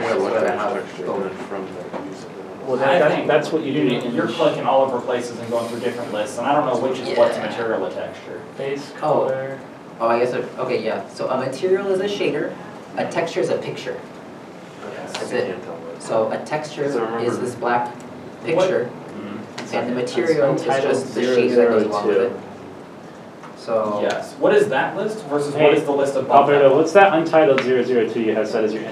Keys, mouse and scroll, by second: 2.8 Tab.